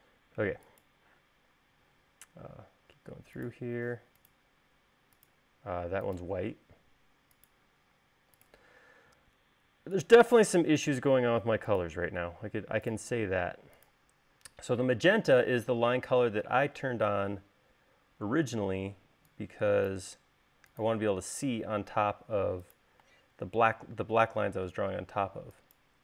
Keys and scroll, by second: 16.7 e.